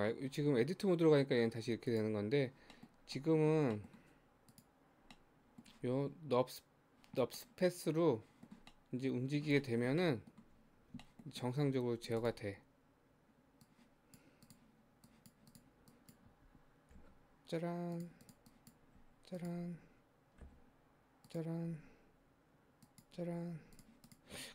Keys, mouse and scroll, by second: 0.4 Tab, 1.7 Tab, 2.0 click, 2.7-4.5 middle drag, 4.5 click, 5.2-10.6 middle drag, 10.6 Tab, 11.1-12.2 shift+middle drag, 12.2 click, 13.7 click, 14.5 click, 15.1 click, 15.5 click, 15.9 click, 16.9 g, 18.3 click, 19.0 g, 19.8 scroll down 1, 20.5 e, 21.7 e, 23.6 Tab, 23.8 click, 24.1 click.